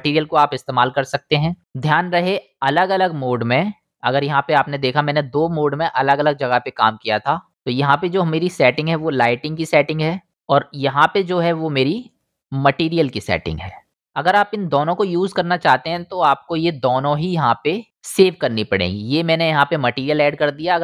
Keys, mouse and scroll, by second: 3.9-10.0 middle drag, 10.0 click, 10.8-13.9 middle drag, 13.9-20.5 drag, 20.5-20.8 middle drag.